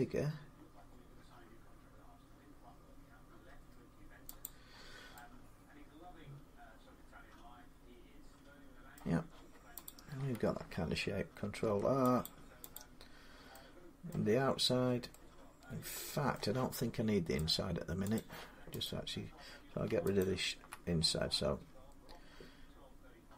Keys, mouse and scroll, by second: 4.2 click, 8.7 middle click, 9.7 click, 11.2 ctrl+r, 12.1 click, 12.6 click, 13.9 middle click, 16.1 middle click, 17.3 click, 18.0 click, 18.8 click, 20.0 alt+click, 20.5 alt+click, 23.2 x.